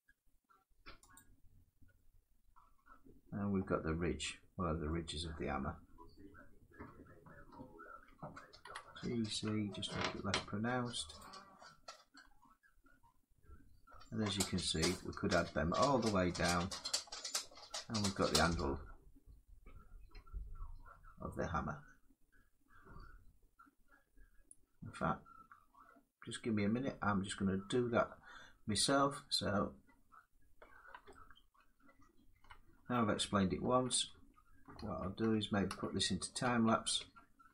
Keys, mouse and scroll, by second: 0.8 click, 3.3 middle click, 3.7 Tab, 4.5 Tab, 4.6 middle click, 5.1 scroll, 5.8 middle click, 6.0 Tab, 6.6 Tab, 8.3 g, 9.0 z, 9.7 g, 11.0 click, 11.8 z, 11.9 middle click, 12.0 Tab, 12.5 scroll up 1, 12.7 click, 12.9 middle click, 13.9 click, 14.1 scroll, 15.1 click, 15.9 middle click, 16.7 middle click, 17.5 middle click, 17.6 middle click, 17.9 scroll down 4, 18.6-20.0 middle drag, 21.0 middle click, 21.6 middle click, 23.3 scroll, 30.4-32.6 middle drag, 33.3 ctrl+z, 33.8 ctrl+z, 34.6 ctrl+z, 34.9 ctrl+z, 35.4 ctrl+z, 36.1 ctrl+z, 36.7 ctrl+z.